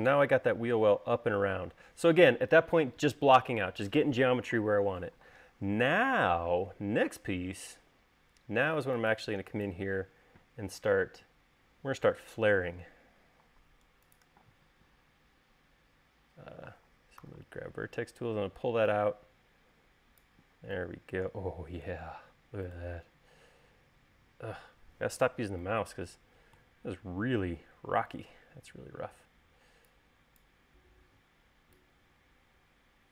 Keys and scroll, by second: 17.7 v.